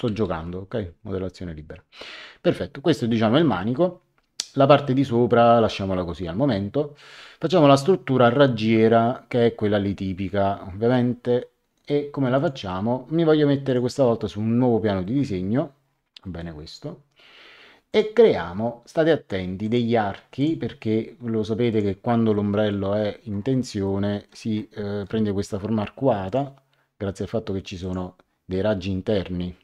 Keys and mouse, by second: 0.0 Return, 0.0 KP_Enter, 12.3 click, 13.6 click, 15.0 middle click, 16.2 middle click, 17.8 click, 19.6 click, 21.7 click, 22.3 middle click, 23.8 middle click, 26.2 click, 27.8 click.